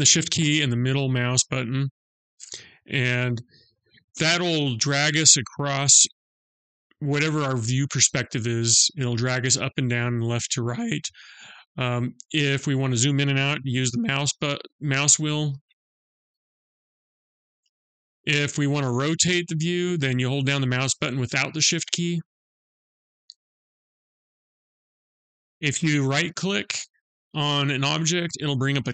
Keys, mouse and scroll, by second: 0.2 shift+middle click, 13.0-13.7 scroll down 5, 14.1 scroll down 2, 15.3-16.5 scroll down 6, 16.4-17.1 scroll up 4, 17.1 scroll down 1, 19.6 middle click, 27.6 right click.